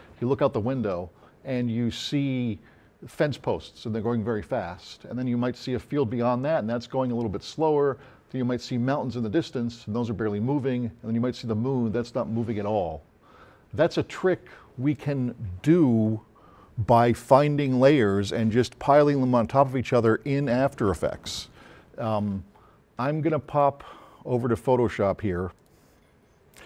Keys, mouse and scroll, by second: 23.5 drag.